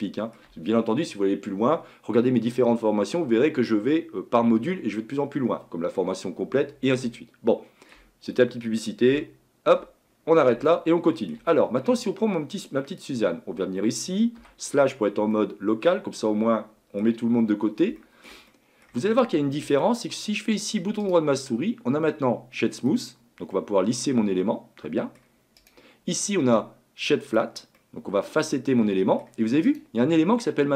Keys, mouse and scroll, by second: 7.6-10.1 shift+middle drag, 10.1-10.7 scroll up 6, 10.7-11.7 shift+middle drag, 11.7-12.9 scroll up 3, 12.9 click, 14.4 KP_Divide, 14.9-15.3 scroll down 2, 15.3-17.4 middle drag, 17.4-18.0 scroll up 2, 18.0-27.7 shift+middle drag, 27.7-30.7 right drag.